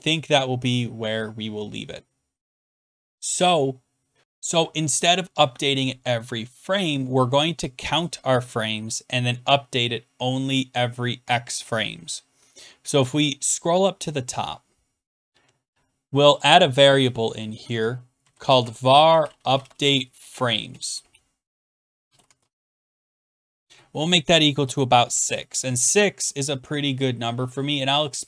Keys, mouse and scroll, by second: 4.2-5.7 scroll, 8.7 scroll down 7, 13.3-14.8 scroll down 17, 16.4 click, 16.9 click, 17.7 Down, 17.9-23.4 typing, 19.2 scroll, 24.7 typing, 25.0 Return.